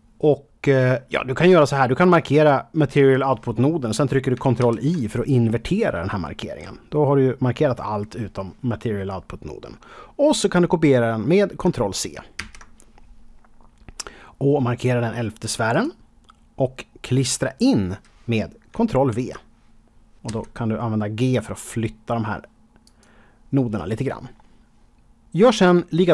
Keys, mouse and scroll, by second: 2.0 click, 12.3 ctrl+c, 15.7 click, 19.0 ctrl+v, 20.2 g, 22.8 click.